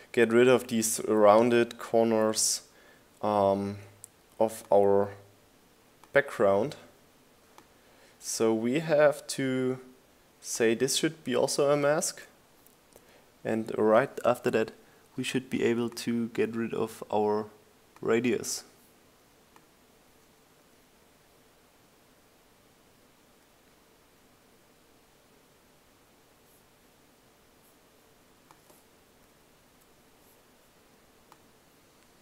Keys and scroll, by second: 31.2 Up.